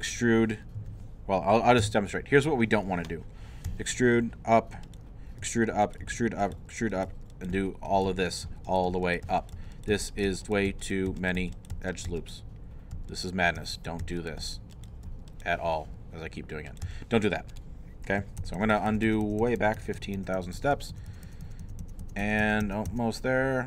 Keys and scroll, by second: 0.8 3, 2.0 |, 3.7 e, 5.4 e, 17.1 e, 18.6 ctrl+z, 19.8 ctrl+z, 20.4 ctrl+z, 20.9 ctrl+z, 21.4 ctrl+z, 22.0 ctrl+z, 22.6 ctrl+z.